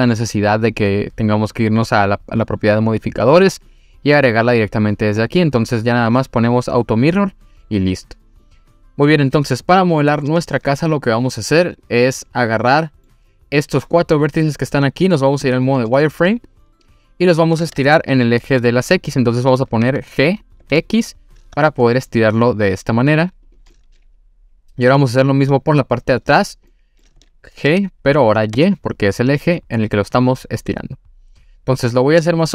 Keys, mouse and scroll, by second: 3.1 click, 11.7 click, 12.8 middle click, 15.5 click, 15.8 middle click, 16.5 click, 17.1-18.6 scroll down 1, 18.6 scroll down 1, 19.8 g, 20.6 x, 23.5 click, 23.7-24.8 middle drag, 25.5 click, 26.3 scroll down 1, 26.7 middle click, 27.7 g, 28.6 y.